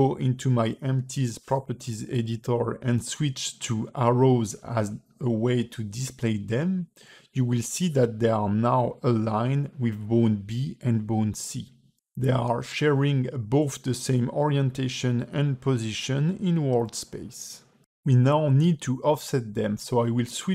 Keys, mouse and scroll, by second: 0.2 middle click, 2.2 middle click, 3.3 click, 4.8 click, 5.8 click, 7.6 click, 8.0 click, 9.7 click, 10.8 click, 11.3 click, 12.5 middle click, 13.3 middle click, 13.9 click, 14.6 shift+click, 15.6 click.